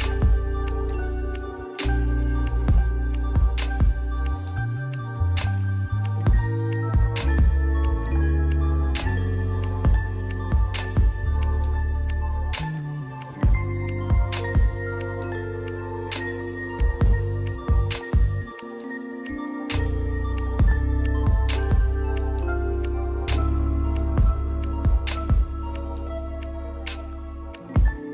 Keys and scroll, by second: 4.0 ctrl+z, 7.2 [, 8.4 ctrl+z, 8.7 ctrl+z, 10.7 ctrl+z, 13.6 ctrl+z, 14.0 ctrl+z, 25.9 ctrl+z, 26.4 ctrl+z.